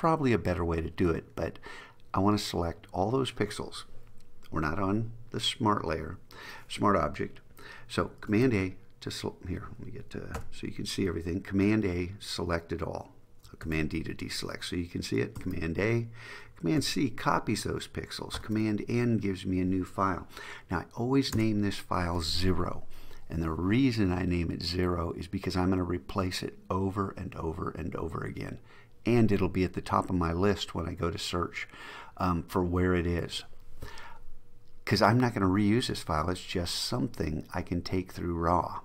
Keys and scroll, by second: 8.4 super+a, 10.5 super+0, 13.7 super+d, 15.5 super+a, 16.9 super+c, 18.5 super+n.